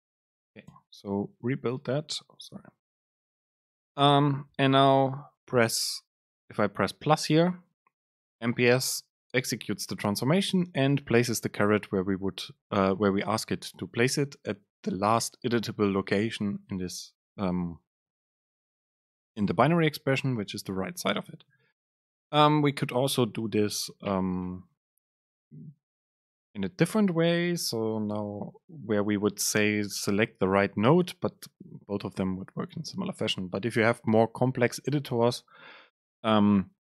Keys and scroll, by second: 0.8 BackSpace, 2.7 super+z, 26.8 BackSpace, 28.0 Escape.